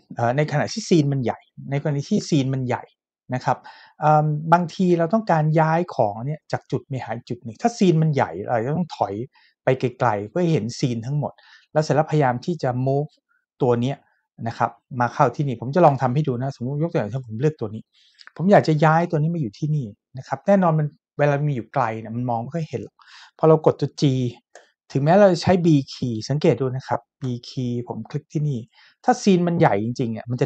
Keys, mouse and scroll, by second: 9.3 shift+middle click, 15.9 Tab, 17.1 click, 24.5 g, 27.2 b.